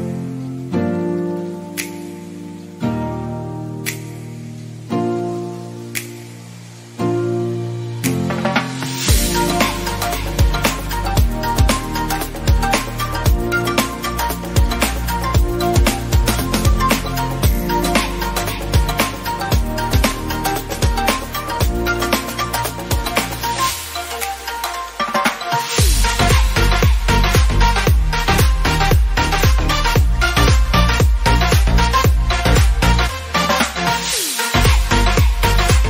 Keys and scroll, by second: 18.2 ctrl+d, 21.1 ctrl+0, 24.7 ctrl+s, 34.8 ctrl++.